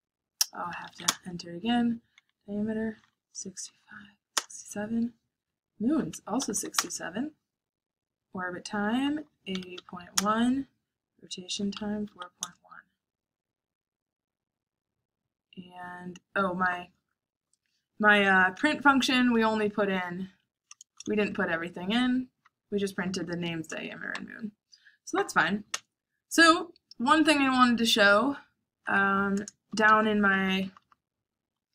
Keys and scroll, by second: 0.4-1.4 typing, 3.0-4.6 typing, 6.1-7.0 typing, 8.7-12.4 typing, 19.5 Up, 20.1 Up, 20.3 Page_Up, 20.9 Return, 22.6-24.1 typing, 25.4-28.1 typing, 29.7-30.4 typing.